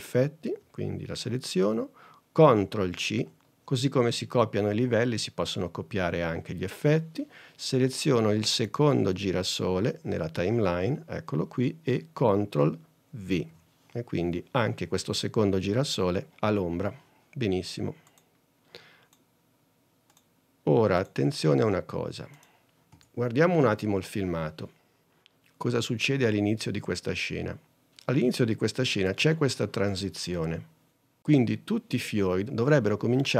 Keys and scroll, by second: 3.1 super+c, 13.4 super+v, 23.1 super+Tab.